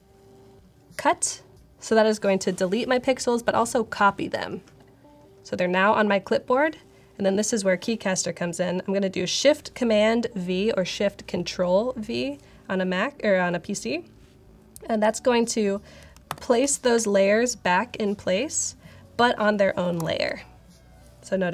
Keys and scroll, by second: 16.2 shift+super+v, 19.9 alt+super+8.